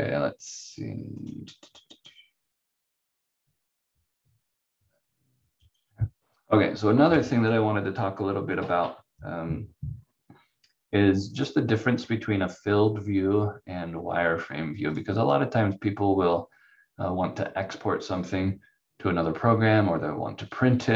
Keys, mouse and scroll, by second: 1.1 click, 4.2 scroll down 1, 7.1 click, 14.8 click.